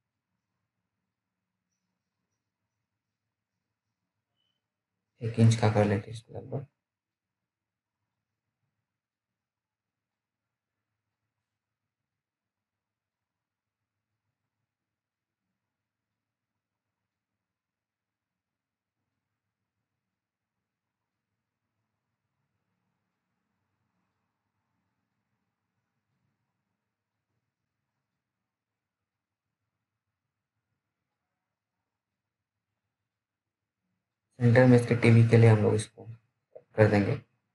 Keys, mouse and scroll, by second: 10.4 f, 13.4-13.8 scroll down 1, 13.8 middle click, 14.6-16.3 scroll down 1, 17.1 F3, 18.0-18.6 scroll up 1, 18.6 click, 20.7-21.1 scroll down 1, 21.1 middle click, 21.8-23.0 scroll up 1, 23.0 click, 37.3 right click, 37.4 right click.